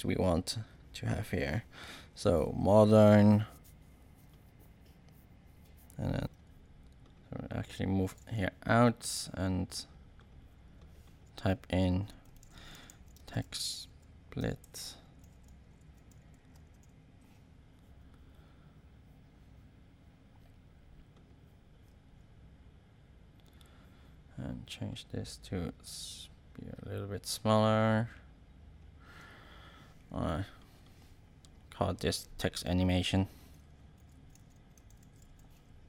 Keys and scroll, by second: 6.2 BackSpace, 12.0-17.0 typing, 33.2-35.7 typing.